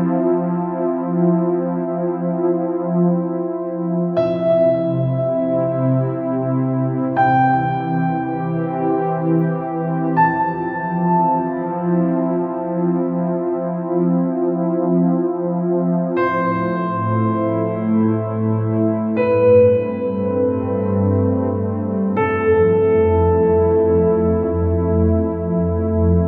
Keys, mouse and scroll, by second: 1.6 click, 2.8 right click, 3.1 click, 3.9-4.3 scroll up 2, 4.7 click, 5.6 right click, 6.1 click, 6.3 scroll down 1, 6.5 middle click, 7.2-7.9 scroll up 4, 8.4 click, 8.7 middle click, 9.2 scroll up 3, 9.4 scroll down 1, 9.6-12.8 middle drag, 12.8-14.6 drag, 14.6 scroll up 4, 15.0 scroll down 3, 15.1-17.0 middle drag, 17.0-18.3 scroll down 2, 21.0 scroll up 2, 21.3 click, 23.3 click.